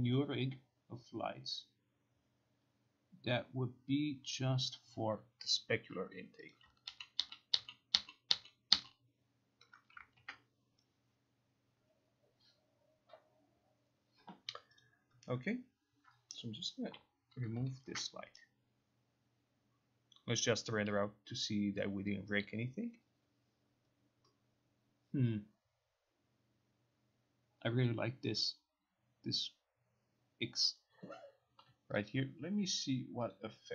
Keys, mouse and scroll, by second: 6.6 click, 7.0 ctrl+z, 7.3 ctrl+z, 7.6 ctrl+z, 8.1 ctrl+z, 8.4 ctrl+z, 8.8 ctrl+z, 10.3 ctrl+r, 14.9 click, 17.0 Delete, 18.0 ctrl+r, 32.1 click, 33.4 click.